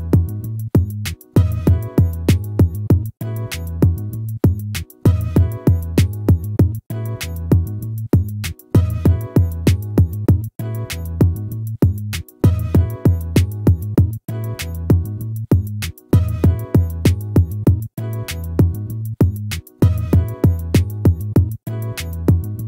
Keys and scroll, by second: 1.0 ctrl+-.